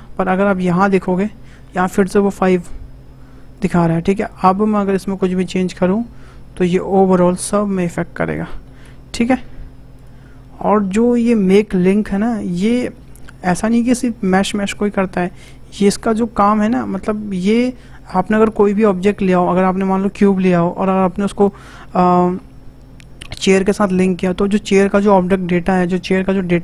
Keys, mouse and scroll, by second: 3.5 click, 4.3 click, 4.7 Tab, 5.5 scroll up 2, 5.9-7.3 middle drag, 7.3 e, 8.7 ctrl+z, 9.6 ctrl+z, 9.9 click, 10.3 scroll down 2, 10.7-13.7 middle drag, 15.2-18.3 middle drag.